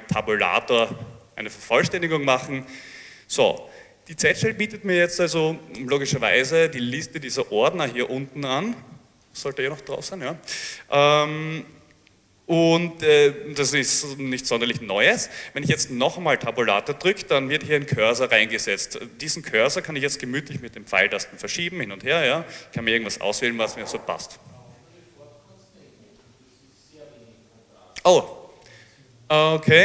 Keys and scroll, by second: 0.9 Tab, 16.5 Tab, 19.4 Right, 20.0 Right, 20.3 Right, 20.6 Right, 21.7 Down, 21.9 Left, 22.4 Left, 22.5 Left.